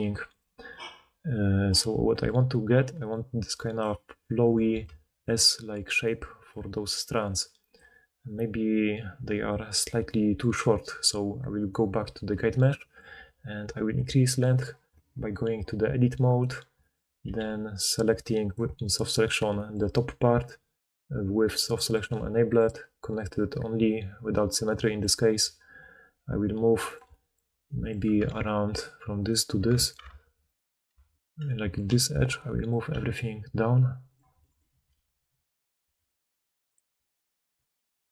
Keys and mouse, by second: 2.7-4.0 d, 4.4 d, 4.6-7.0 d, 7.7 d, 8.7-9.3 drag, 8.7-11.7 middle drag, 8.7-9.3 right drag, 11.7-13.1 drag, 13.1 Tab, 16.2 click, 17.2 g, 18.6-21.6 drag, 21.6 middle click, 21.8 click, 21.9-22.5 middle drag, 22.5-28.3 drag, 25.4 g, 29.1 ctrl+click, 30.0 ctrl+z, 30.4 ctrl+click, 31.8 g, 32.8 g, 34.6 r, 35.7 g.